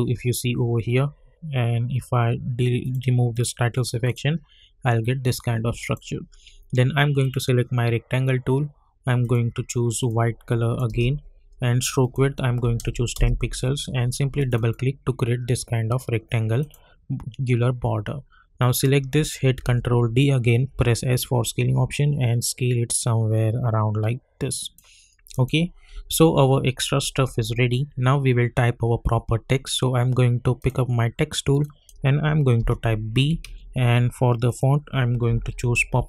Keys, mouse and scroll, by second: 2.8 click, 11.1 Return, 12.0 click, 13.1 Return, 14.4 click, 19.5 ctrl+d, 20.7 s, 21.4-25.3 drag, 25.9 u, 30.6 click, 32.5 shift+b, 33.4 ctrl+a, 34.4 click, 35.0-36.0 typing.